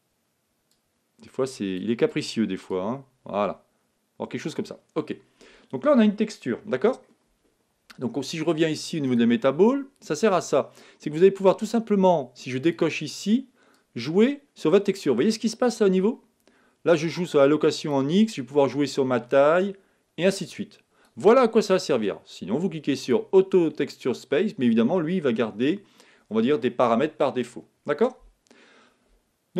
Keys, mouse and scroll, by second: 0.6-4.4 drag, 5.4-8.9 middle drag, 9.0-10.9 drag, 12.6-15.4 drag, 19.1-21.0 drag, 23.0-24.7 drag.